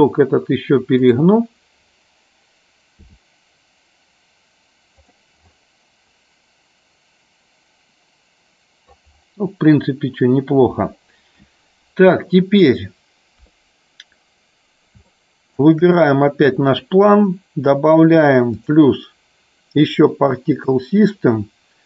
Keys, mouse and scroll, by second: 1.1 click, 5.1 click, 6.2-9.1 middle drag, 15.1 shift+middle click, 15.9 click, 18.5 click, 20.6 click.